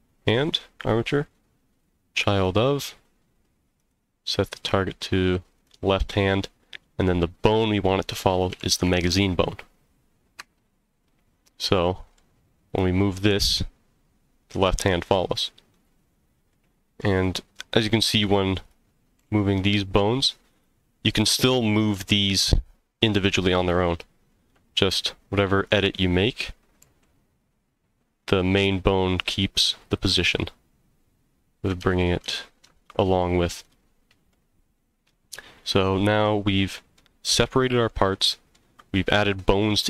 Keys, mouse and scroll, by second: 0.3-2.4 drag, 3.8 click, 7.5-11.2 drag, 11.7-12.2 middle drag, 12.7 click, 13.2 g, 15.7 right click, 16.1-16.5 scroll up 2, 16.5-17.0 middle drag, 17.2 scroll up 1, 17.6 middle click, 18.2 click, 18.6 click, 19.2 g, 20.5 right click, 21.9 g, 23.6 right click, 24.9 g, 25.6 click, 26.1 click, 26.8 g, 29.8 right drag, 31.8 ctrl+z, 32.4 ctrl+z, 33.6 click, 34.3-37.0 middle drag, 37.9-38.5 middle drag.